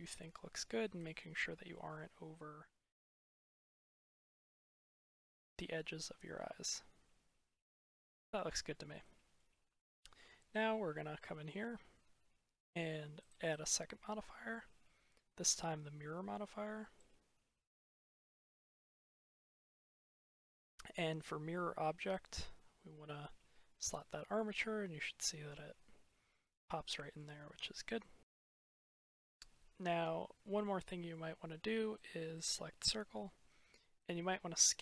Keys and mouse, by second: 1.2-1.7 middle drag, 5.1-8.3 middle drag, 8.9-9.3 middle drag, 9.6-10.0 shift+middle drag, 13.0 click, 13.3-15.4 drag, 17.9 ctrl+z, 18.6-19.5 drag, 19.5-19.9 middle drag, 23.8-24.5 middle drag, 25.1 middle drag, 26.7-27.0 middle drag, 27.6-28.2 drag, 29.2-30.5 drag, 30.5-31.0 middle drag, 32.3-34.8 drag.